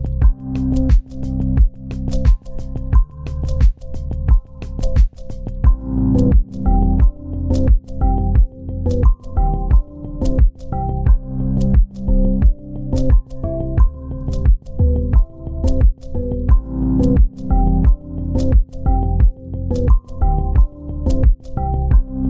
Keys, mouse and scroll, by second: 4.1 click, 5.6 alt+Tab, 13.9 ., 16.6 typing, 17.3 Return, 18.9 z, 20.9 ctrl+space, 21.2 ctrl+click.